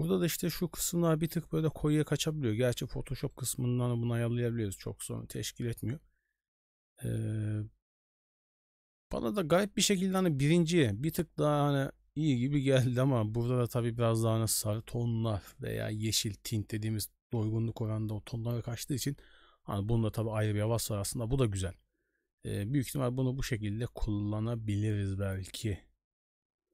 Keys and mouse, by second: 3.3 middle click.